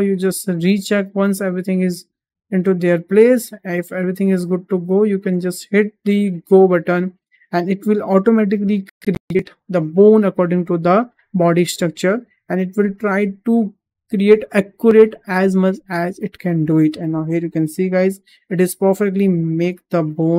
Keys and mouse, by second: 1.0-3.3 middle drag, 3.8 `, 4.9 shift+middle drag, 6.7-13.6 drag, 17.3-18.8 middle drag, 19.1 shift+middle click, 19.5 middle click.